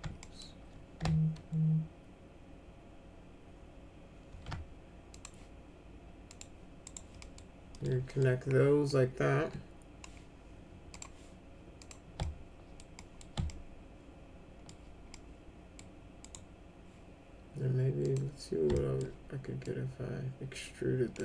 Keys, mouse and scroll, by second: 0.2 alt+middle click, 4.2 alt+c, 5.1 click, 6.3 click, 6.8 right click, 7.2 middle click, 7.7 middle click, 8.0 middle click, 9.3 w, 10.9 click, 11.7 click, 12.2 alt+middle click, 12.9 middle click, 13.4-14.6 alt+middle drag, 15.1 middle click, 16.2 right click, 18.0 click, 18.7 alt+middle click, 19.6-21.1 drag.